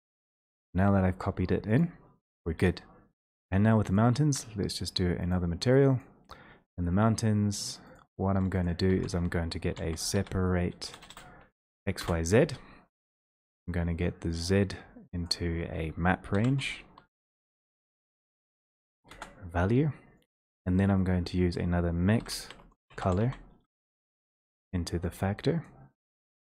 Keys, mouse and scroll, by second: 3.4 click, 5.4 click, 6.0 click, 8.0 click, 8.8 click, 9.0 alt+space, 9.6-11.2 typing, 12.0 Return, 13.3 click, 13.8 click, 15.2 click, 16.3-18.6 typing, 19.1 Return, 22.4-23.2 typing, 23.7 Return, 25.2 click, 26.0 click.